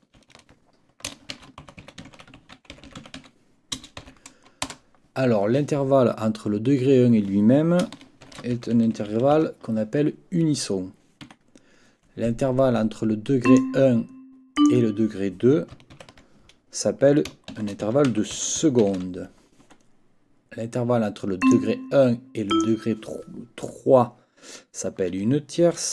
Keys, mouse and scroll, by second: 0.2 ctrl+t, 1.1-3.7 typing, 4.6 Return, 8.0-9.8 typing, 11.2 Escape, 13.4 click, 14.6 click, 16.0 ctrl+t, 17.3-19.4 typing, 19.6 Escape, 21.4 click, 22.5 click.